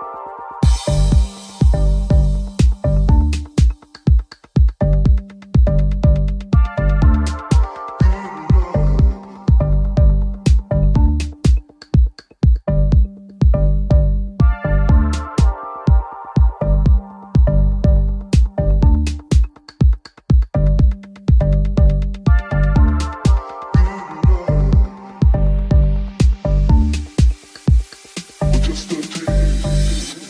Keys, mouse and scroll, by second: 0.5-7.8 middle drag, 2.3-4.5 typing, 5.5 g, 5.8 z, 7.2 ctrl+z, 7.8 right click, 8.3 right click, 8.9 g, 10.4-14.9 ctrl+middle drag, 11.5 Tab, 14.9 ctrl+click, 15.2 ctrl+Tab, 17.8-22.5 ctrl+drag, 22.5-24.0 middle drag, 24.0-30.2 drag, 24.0 f.